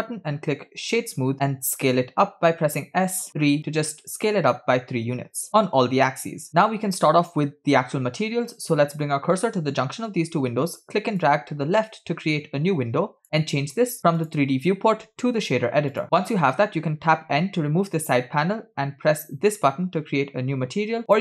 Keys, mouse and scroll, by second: 2.0 s, 4.8-5.2 scroll up 3, 6.7-7.2 scroll down 1, 11.3-13.3 drag, 14.0 scroll up 2, 14.2-16.0 drag, 17.3 n, 21.1-21.2 drag.